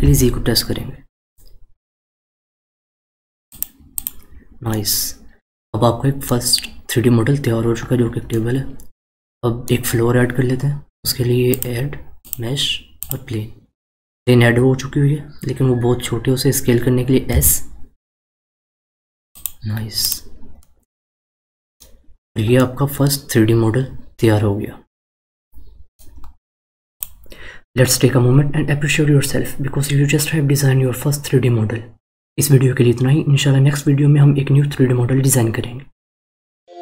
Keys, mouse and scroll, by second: 3.9 click, 4.7-6.9 middle drag, 6.9-7.3 scroll down 2, 7.8-8.3 scroll up 1, 8.3-11.4 middle drag, 11.5-14.5 drag, 15.3-17.3 scroll up 1, 17.3 s, 20.0 click, 20.5-21.9 middle drag, 21.9-22.5 scroll down 3, 22.5-25.5 middle drag.